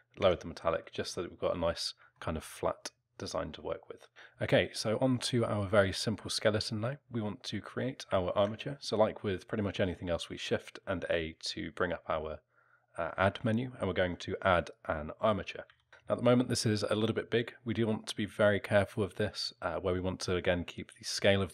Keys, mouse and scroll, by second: 0.2 Tab, 0.7 alt+middle click, 1.7 scroll down 1, 2.2 alt+middle click, 4.1 click, 8.3 shift+a, 15.7 z, 15.9 alt+middle click.